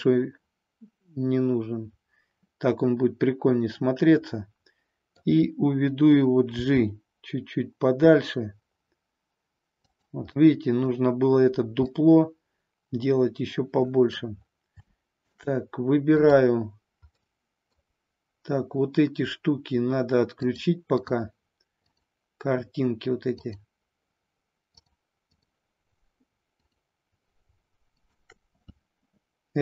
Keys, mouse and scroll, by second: 6.3 g, 9.8 click, 10.3-11.0 middle drag, 11.8-14.1 middle drag, 14.8 shift+scroll up 1, 15.0 shift+middle click, 15.2 shift+scroll down 1, 16.1 click, 17.1 middle click, 20.3-21.2 drag, 21.8-23.0 drag, 24.9-25.4 drag, 26.4 click, 27.8 shift+click.